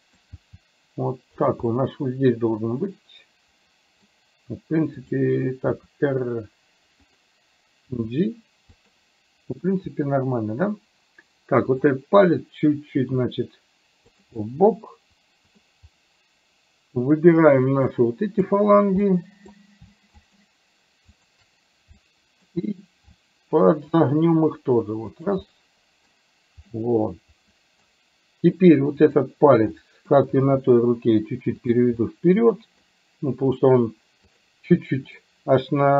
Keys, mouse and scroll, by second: 0.4 g, 1.7-4.1 middle drag, 5.9 r, 7.9 g, 11.9 click, 13.2 r, 14.5-15.6 middle drag, 18.0 click, 19.1 middle click, 20.4 shift+click, 21.2 shift+click, 22.0 middle click, 24.0 r, 25.5 middle click, 26.9-27.9 middle drag, 29.0 click, 29.9 middle click, 30.5 g, 32.1 scroll up 1, 32.2 middle click, 34.7 middle click.